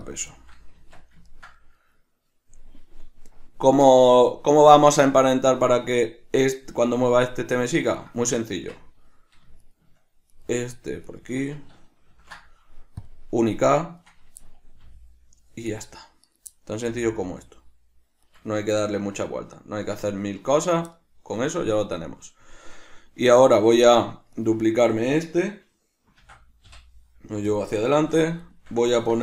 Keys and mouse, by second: 0.5-8.1 shift+middle drag, 0.9 Tab, 8.1 right click, 8.7 Tab, 9.8 shift+right click, 10.5 right drag, 11.2 shift+right click, 12.3 ctrl+shift+c, 14.1 right click, 14.6-16.5 middle drag, 15.0 g, 16.5 right click, 16.7-18.5 middle drag, 17.0 g, 18.5 right click, 18.8-23.7 shift+middle drag, 20.5 Tab, 23.7 right click, 24.5 right click, 26.3 shift+d, 27.7 click, 28.1 alt+q, 28.6-29.2 shift+middle drag.